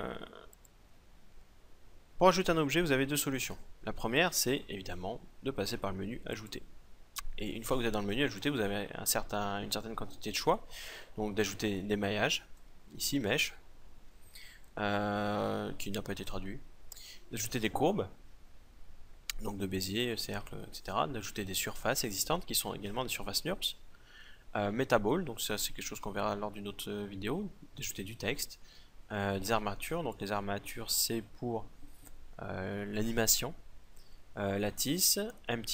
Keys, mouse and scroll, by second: 6.2-14.3 drag.